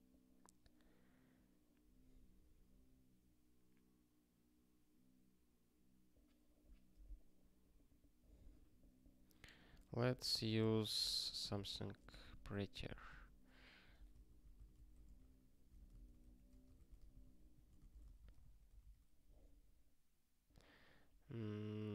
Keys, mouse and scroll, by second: 7.5 scroll up 1, 9.5 click, 10.0 ctrl+b, 10.3 alt+d, 11.0-18.5 typing, 19.1 ctrl+k.